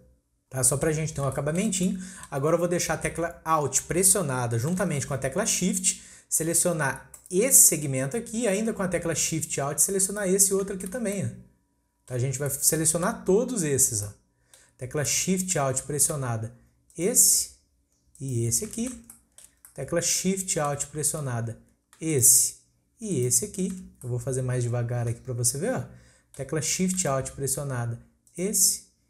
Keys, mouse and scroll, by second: 1.1 scroll up 1, 1.3-2.5 shift+middle drag, 2.5-3.6 scroll up 1, 3.6-5.5 scroll up 1, 7.1 alt+shift+click, 10.1 alt+shift+click, 10.7-11.2 scroll down 2, 11.2-12.3 shift+middle drag, 12.3 scroll down 1, 12.5 middle click, 13.4-13.8 scroll up 2, 13.8 scroll down 1, 14.0-16.9 middle drag, 16.9 alt+shift+click, 18.2 alt+shift+click, 19.1-22.1 shift+middle drag, 22.1 alt+shift+click, 23.1 alt+shift+click, 23.9 scroll up 1, 24.1-26.6 middle drag, 26.6-28.3 scroll up 1, 28.3 alt+shift+click.